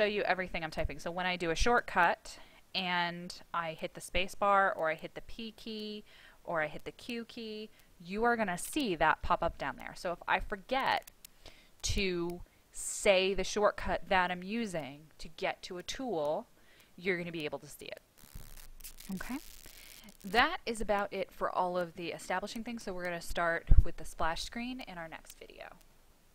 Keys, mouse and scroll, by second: 1.5 space, 5.3 p, 6.8 q, 20.0 click.